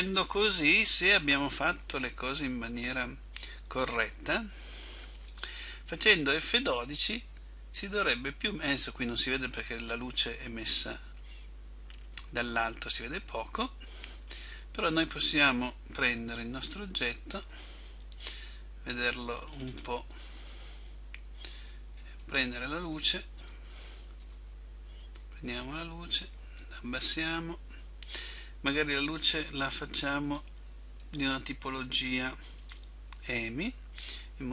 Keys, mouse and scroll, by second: 5.3 click, 13.3 Escape, 14.3-16.6 scroll down 4, 16.6 7, 18.2 KP_7, 19.6 scroll down 5, 20.8 middle click, 24.5 Tab, 24.5 right click, 25.1 right click, 26.5 click.